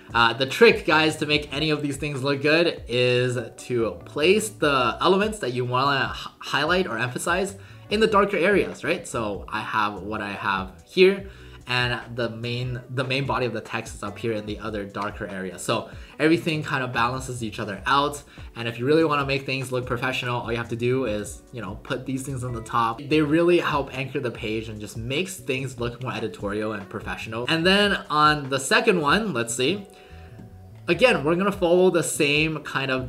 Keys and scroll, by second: 27.4 w.